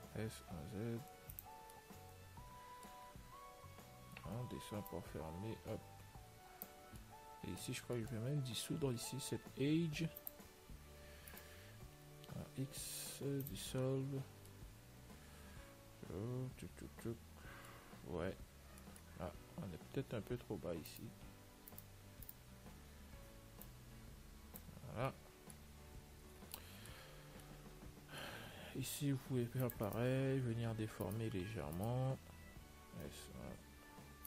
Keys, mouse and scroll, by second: 1.9 scroll up 1, 2.1-5.2 middle drag, 5.2 click, 7.1-10.5 middle drag, 10.5 click, 11.6-13.5 right drag, 12.7 x, 14.7-16.7 middle drag, 18.5 Tab, 19.0-21.2 middle drag, 19.5 Tab, 21.2-24.9 right drag, 23.9 click, 25.2-29.7 middle drag, 26.5 a, 29.7 ctrl+r, 29.9-31.3 middle drag, 31.3-33.9 right drag, 33.2 ctrl+r, 33.2 s.